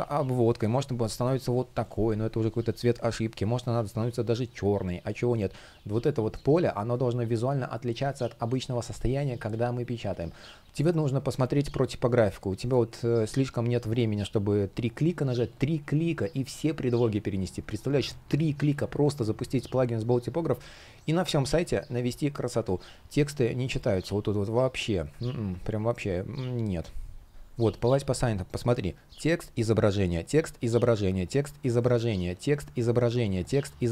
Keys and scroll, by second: 8.7 super+z, 12.4 space, 24.9 super+z.